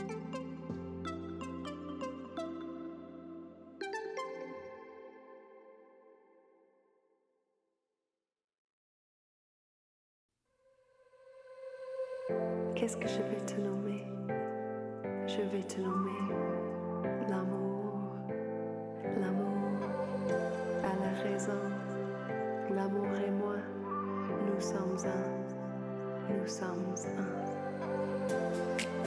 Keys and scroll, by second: 6.1 alt+shift+a, 8.1 v, 15.9 5, 16.7 ctrl+z, 17.3 ctrl+a, 18.2 KP_5, 18.4 Return, 23.3 r, 24.7 ctrl+d, 24.8 ctrl+d, 25.8 v.